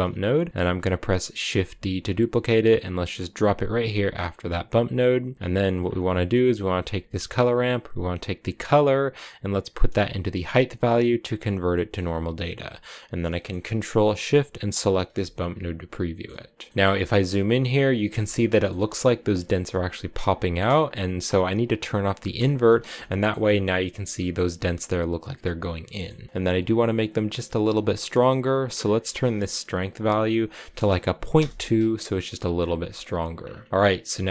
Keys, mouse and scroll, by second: 1.2 shift+d, 4.5-5.5 drag, 5.5 middle click, 5.6-6.1 scroll down 5, 6.1-8.4 middle drag, 8.4-11.4 drag, 11.5 middle click, 11.8-13.1 scroll up 3, 13.1-14.5 middle drag, 14.5 ctrl+shift+click, 15.4-16.7 shift+middle drag, 16.7-17.9 scroll up 3, 17.9 scroll up 1, 18.0-20.7 shift+middle drag, 20.7-22.2 scroll up 2, 22.2 click, 22.8 shift+middle click, 23.2-23.9 scroll up 3, 23.9-28.6 shift+middle drag, 28.6-31.7 drag, 32.4-33.5 scroll down 15, 33.5-34.3 middle drag.